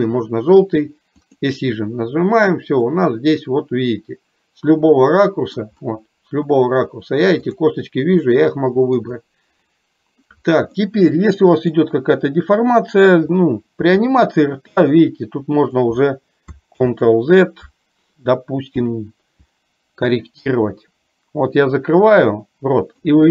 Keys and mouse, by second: 1.2 click, 3.0-5.6 middle drag, 7.6 click, 8.2 middle click, 10.7-11.7 middle drag.